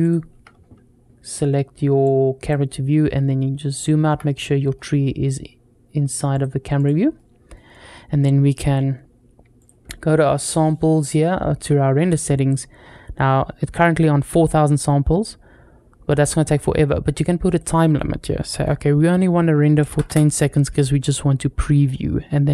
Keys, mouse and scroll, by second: 1.9 click, 2.8-3.4 scroll down 2, 3.5-4.0 shift+middle drag, 4.1 middle click, 6.2 click, 6.6 click, 7.0 middle click, 9.4 click, 17.3-20.5 drag.